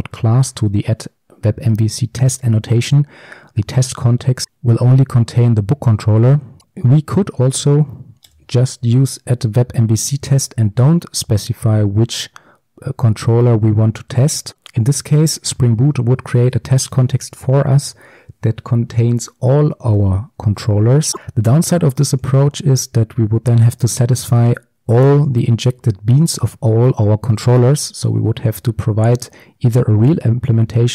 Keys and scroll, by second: 21.1 ctrl+alt+Left, 22.3 ctrl+b.